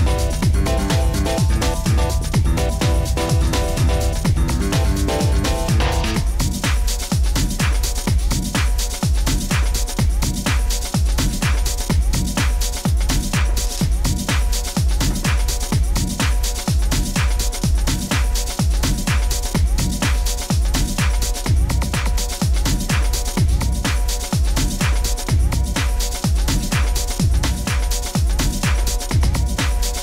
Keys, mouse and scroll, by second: 1.0 click, 4.5 click, 5.8 click, 9.0 click, 10.2-11.2 scroll, 12.7 click, 15.0 click, 17.3-18.1 typing, 19.1 Return, 21.6 click, 25.3 click, 26.7 click, 27.4 click, 28.6 middle click, 29.1 scroll, 29.2 middle click, 29.3 middle click, 29.6-30.0 scroll.